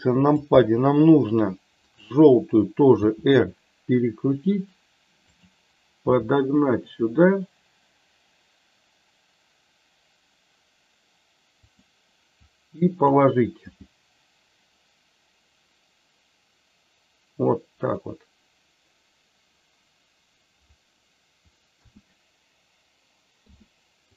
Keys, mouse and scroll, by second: 1.9 click, 3.0 r, 5.3 click, 6.1 g, 12.4 click, 13.6 g, 21.7 a, 23.2 i.